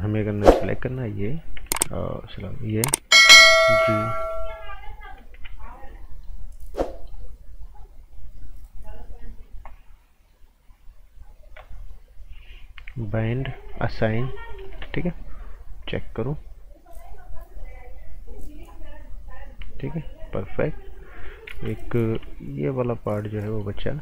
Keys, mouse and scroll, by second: 0.5 b, 1.2 click, 2.2 click, 3.2 g, 4.0 alt+right click, 5.3 g, 5.7 scroll down 1, 6.0 right click, 6.5-6.9 scroll up 1, 6.9 right click, 8.1 click, 13.0 click, 14.0 right click, 14.4 scroll down 1, 14.6 right click, 14.8-15.8 typing, 17.0 click, 21.5 ctrl+z, 21.7 scroll up 1, 23.4 right click.